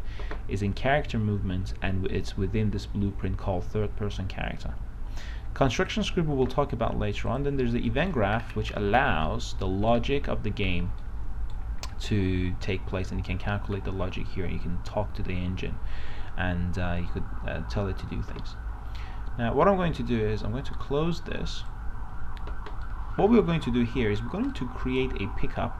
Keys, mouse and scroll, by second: 8.1 right click, 8.6-9.5 scroll down 1, 9.5-10.8 right drag, 10.9 scroll up 1, 11.2 right click, 12.2 scroll up 1, 21.9-23.0 drag, 23.2 right click, 23.9 s, 24.8 click.